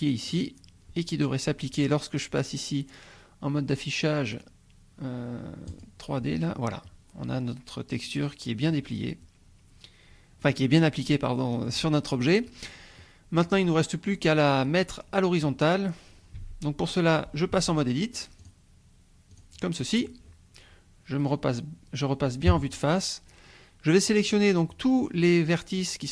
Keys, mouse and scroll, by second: 0.3 click, 1.2-1.6 scroll down 1, 5.7 click, 8.7-10.6 drag, 11.1-11.7 drag, 11.7-13.0 scroll down 1, 13.0-13.5 drag, 16.4 Tab, 17.6 Tab, 18.4 click, 19.3 click, 22.5 KP_1.